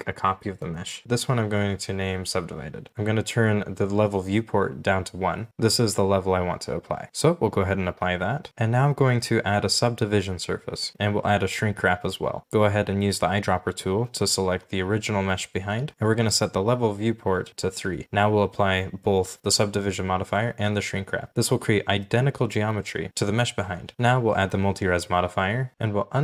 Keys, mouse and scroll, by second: 1.0 double click, 1.8-3.5 typing, 3.6 Return, 7.0 g, 9.5 right click, 16.9 3, 17.5 right click, 21.3 shift+middle click, 21.3 scroll up 1, 21.4 g, 23.9 right click.